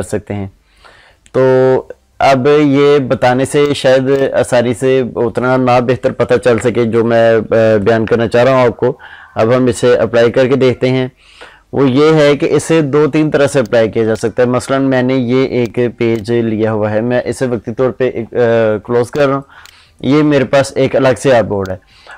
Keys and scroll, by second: 17.7 ctrl+shift+i.